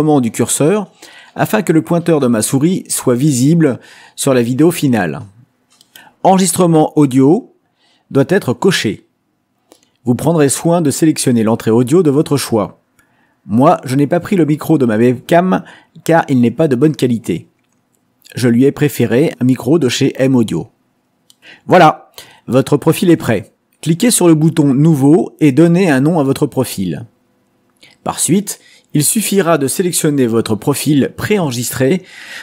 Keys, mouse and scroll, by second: 9.4 click, 18.9 click, 22.8 click, 24.8 click, 25.5-29.1 typing, 30.6 click, 30.9 middle click.